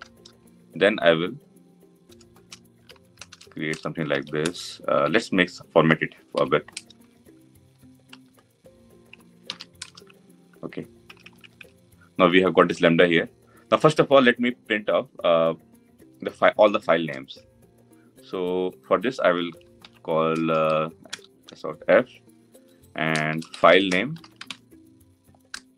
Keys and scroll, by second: 6.1 ctrl+y, 7.5 ctrl+y, 7.8 Delete, 9.1 Delete, 10.8 Tab, 20.9 Return, 22.9 Return.